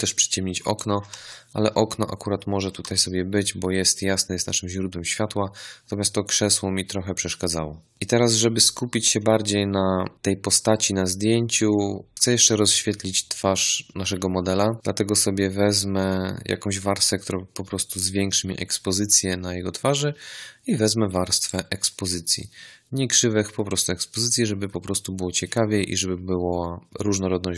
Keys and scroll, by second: 1.1 ctrl+z, 2.7 v.